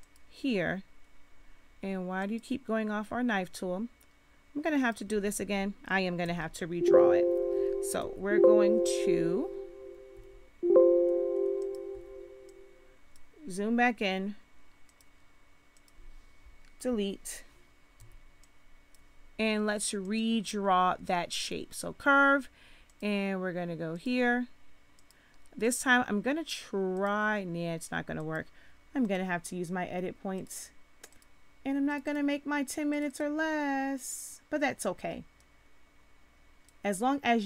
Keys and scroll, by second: 6.2 z, 7.9 z, 10.1 v, 11.9 v, 16.7 Delete, 18.0 z.